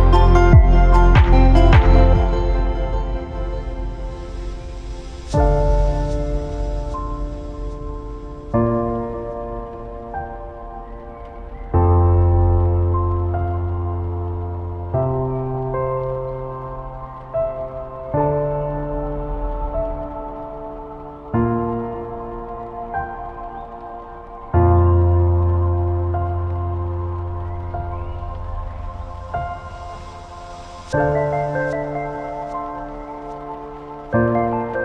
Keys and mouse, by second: 4.0-5.1 shift+middle drag, 7.1 click, 8.9-9.9 shift+drag, 10.8 click, 13.1-14.4 drag, 16.8-17.3 drag, 18.7-19.1 shift+middle drag, 19.1-20.2 shift+drag, 21.7-24.2 drag, 26.4 middle click, 27.3-27.9 shift+middle drag, 28.5-28.8 shift+middle drag, 32.5-33.3 shift+middle drag.